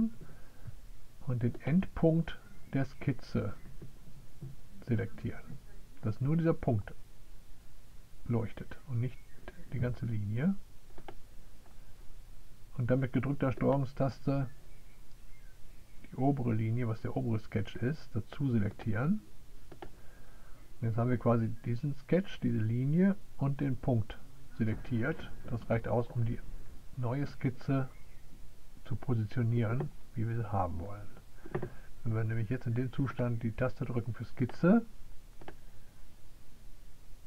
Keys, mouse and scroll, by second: 1.1-6.5 drag, 19.2 click, 22.5-33.6 middle drag, 36.2 click.